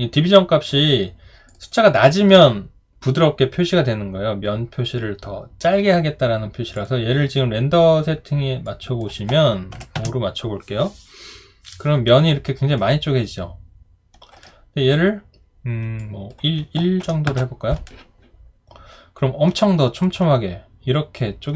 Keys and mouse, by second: 10.0 Return, 12.9 alt+right click, 17.3 Return, 19.6 alt+click, 20.2 alt+right click.